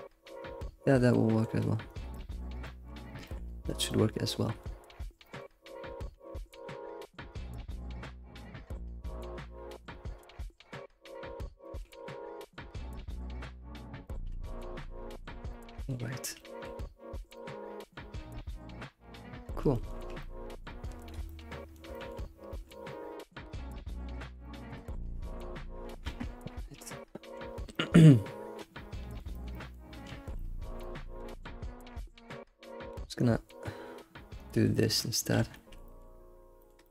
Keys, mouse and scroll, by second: 0.5 g, 2.0 click, 2.1-3.2 middle drag, 3.2 g, 3.9-4.9 middle drag, 4.0 g, 4.9 scroll up 1, 6.1 g, 7.4 click, 7.7 g, 11.7 click, 11.8 g, 12.6 g, 14.1-17.1 shift+middle drag, 16.5 g, 17.1 scroll down 2, 17.3-20.0 middle drag, 20.2 middle click, 21.1 click, 21.2 middle click, 22.2 scroll, 22.3 scroll down 1, 22.6 middle click, 23.5 alt+middle click, 23.9 scroll down 2, 24.1 shift+z, 24.4 shift+middle click, 25.0 shift+z, 26.0 alt+shift+z, 26.5 scroll up 3, 26.9-30.1 shift+middle drag, 30.1 alt+shift+z, 30.3 alt+shift+z, 30.3 middle click, 31.0 Tab, 31.2 Tab, 31.8 click, 32.0-33.1 middle drag, 33.1-34.7 drag, 35.0-35.4 middle drag, 35.4 alt+shift+z, 35.5-36.2 shift+middle drag, 36.2-36.9 scroll up 8, 36.7 alt+middle drag.